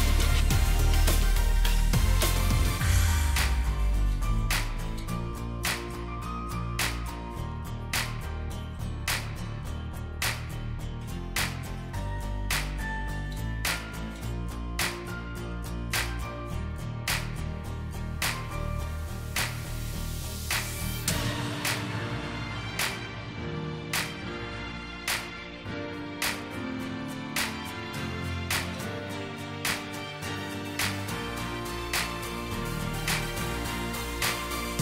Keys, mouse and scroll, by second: 0.4 shift+click, 6.9 shift+click, 12.7 ctrl+g, 15.1 Down, 16.9 shift+click, 18.2 ctrl+g, 19.0 shift+click, 21.7 shift+click, 21.8 ctrl+g, 23.3 shift+click.